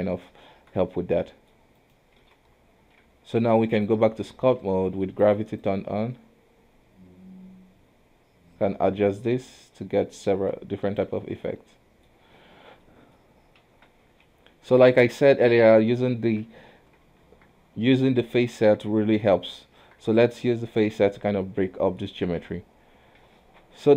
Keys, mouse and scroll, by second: 0.0 scroll up 1, 0.5 scroll up 1, 0.6-1.1 shift+middle drag, 1.1 alt+a, 1.4-1.9 middle drag, 1.9 right click, 2.4 alt+w, 3.1 ctrl+Tab, 4.7 d, 4.7 f, 5.7 click, 11.6-13.3 middle drag, 13.3-13.6 scroll up 2, 13.8 ctrl+z, 14.1 scroll down 3, 14.3 KP_1, 14.9 shift+middle click, 15.1-15.5 scroll up 2, 15.7 KP_3, 16.4 Tab, 16.9 alt+a, 17.4 Tab, 18.7-19.8 scroll down 2, 19.8 Tab, 20.3 alt+a, 21.2-22.4 middle drag, 22.4 KP_3.